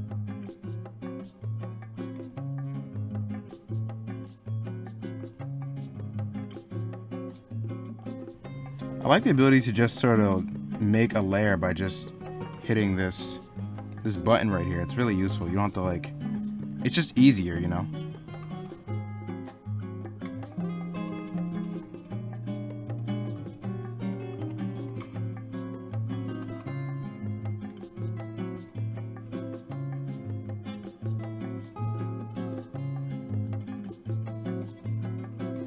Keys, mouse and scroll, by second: 0.6 ctrl+z, 1.2 middle click, 1.9 middle click, 2.7 ctrl+z, 3.3 middle click, 3.6 ctrl+z, 4.1 ctrl+z, 4.7 middle click, 5.5 middle click, 5.9 s, 7.4 middle click, 7.7 middle click, 8.2 middle click, 9.4 e, 9.9 b, 11.8 middle click, 17.1 ctrl+z, 19.1 middle click, 19.3 ctrl+z, 19.6 ctrl+z, 20.3 ctrl+z, 20.6 ctrl+z, 21.3 ctrl+z, 21.6 ctrl+z, 22.1 ctrl+z, 22.5 ctrl+z, 22.9 ctrl+z, 24.0 ctrl+z, 24.4 ctrl+z, 24.9 ctrl+z, 25.9 ctrl+z, 26.4 ctrl+z, 27.0 ctrl+z, 28.5 ctrl+z, 29.3 ctrl+z, 29.8 ctrl+z, 31.1 ctrl+z, 31.5 ctrl+z, 31.7 ctrl+z, 32.3 ctrl+z, 33.7 ctrl+z, 34.2-35.1 typing, 35.4 ctrl+z.